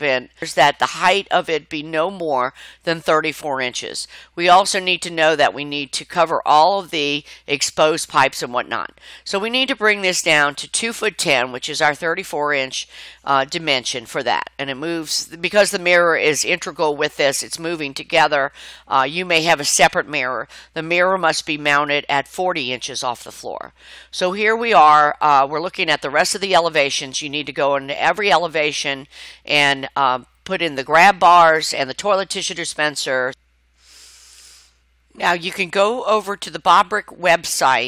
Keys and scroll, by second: 15.8 2, 16.3 ', 16.8 1, 17.3 0, 17.7 Return, 19.4 Escape.